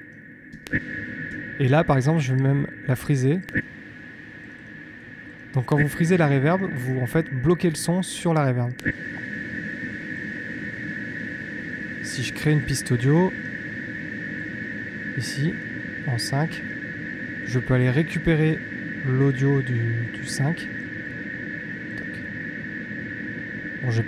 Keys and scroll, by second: 0.4 space, 3.4 space, 4.9 space, 8.7 space, 11.8 super+t.